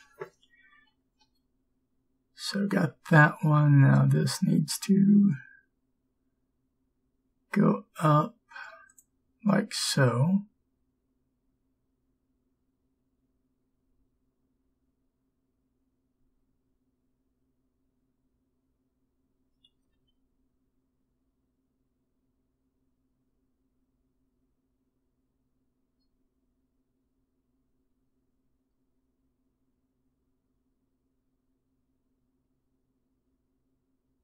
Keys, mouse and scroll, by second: 3.7 g, 20.0 g.